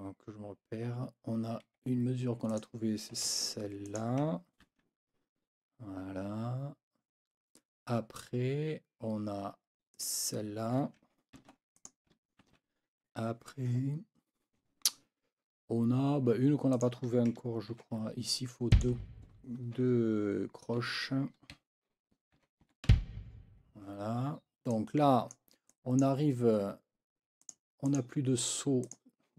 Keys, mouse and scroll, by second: 1.7 Escape, 2.5 click, 3.3 ctrl+c, 3.9 ctrl+click, 4.7 ctrl+v, 9.9 click, 11.3 ctrl+c, 11.7 ctrl+click, 12.4 ctrl+v, 16.7 click, 17.7 ctrl+v, 18.7 click, 20.8 4, 21.5 Right, 22.3 n, 22.6 KP_4, 22.9 b, 23.5 Escape, 24.7 click, 25.7 click, 27.4 click, 27.9 click, 28.4 click, 28.8 click.